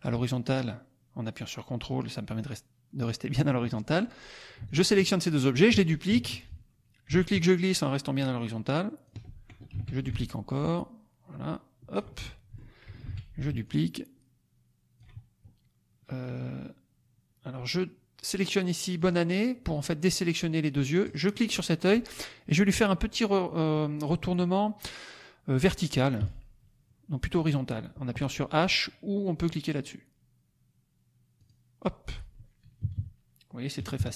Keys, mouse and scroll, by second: 4.6 shift+click, 6.0 ctrl+d, 6.4-9.2 ctrl+drag, 9.7 ctrl+d, 10.1-12.1 ctrl+drag, 12.2 ctrl+middle click, 13.2 ctrl+d, 13.6-15.1 ctrl+drag, 18.9 click, 21.0 click, 26.1 v, 31.3 click, 32.8 KP_Subtract, 33.7 KP_Subtract.